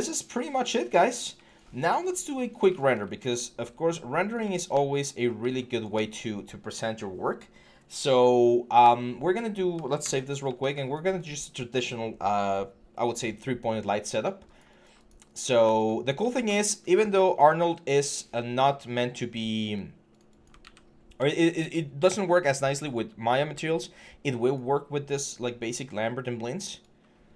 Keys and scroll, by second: 9.8 ctrl+s, 20.4 ctrl+a, 21.0 ctrl+a.